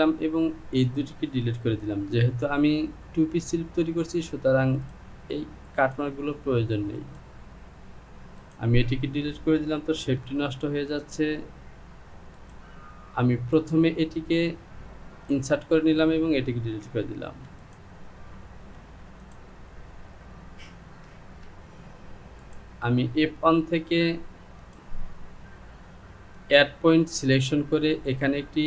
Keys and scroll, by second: 1.9 Delete, 17.5 Delete.